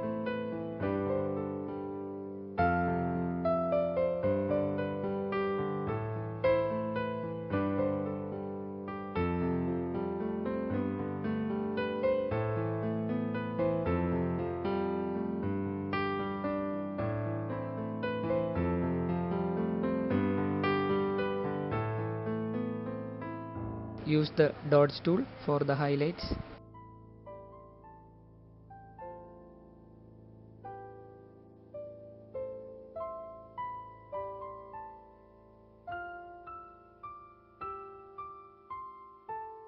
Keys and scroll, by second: 1.2 typing, 5.0 space, 6.2-9.2 typing, 11.0-11.8 typing, 15.8 space, 18.6 space, 19.5 [, 21.0 [, 30.2-31.7 typing, 34.0-35.0 typing, 38.3-39.0 typing.